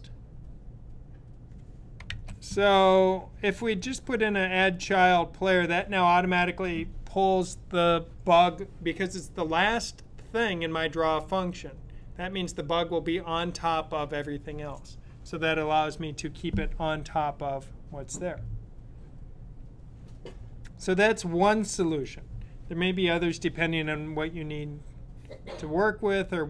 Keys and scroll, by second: 2.1 Right.